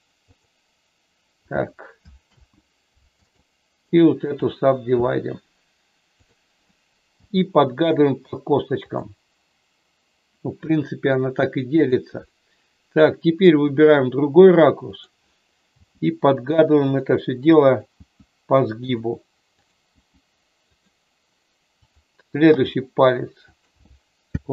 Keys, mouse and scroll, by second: 2.2 ctrl+z, 3.8 right click, 7.2 g, 8.8 click, 10.7 middle click, 11.8 click, 12.2-13.9 middle drag, 14.8 click, 15.7 g, 16.8 click, 17.9 g, 18.8 click, 19.9 g, 21.7 click, 22.4 g, 23.4 click.